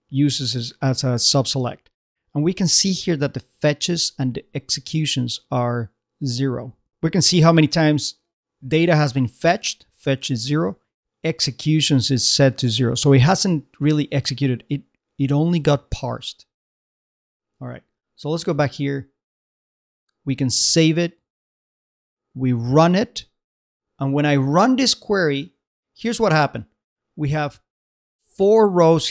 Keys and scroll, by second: 16.8 super+Tab.